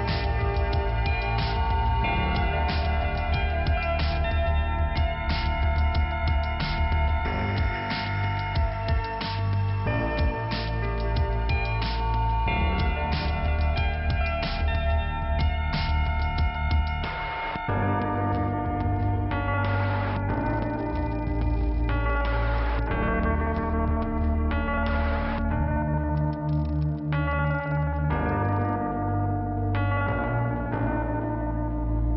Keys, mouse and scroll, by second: 0.0 scroll down 2, 2.8 scroll up 1, 4.3 middle click, 6.0 click, 6.4 click, 6.5 double click, 7.0 double click, 7.1 double click, 7.5 double click, 8.2 click, 8.9 click, 9.6 click, 10.4 click, 10.9 scroll down 2, 14.3 right click, 14.9 middle click, 17.3 click, 18.3 click, 18.5 click, 19.8 middle click, 23.0 middle click, 29.0 click, 30.7-31.8 scroll up 1, 31.8 scroll up 1.